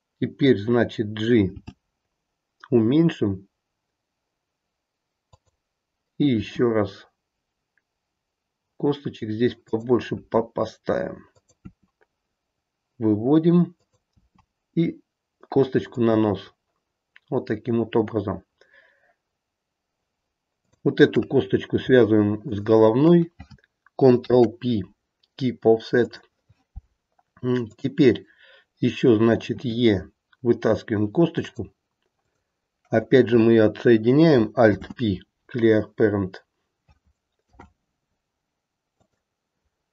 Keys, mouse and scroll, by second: 1.5 g, 6.3 e, 10.2 e, 11.6 e, 20.5 click, 22.4 shift+click, 24.1 ctrl+p, 27.6 click, 29.5 e, 32.2 click, 34.6 alt+p, 37.4 alt+p.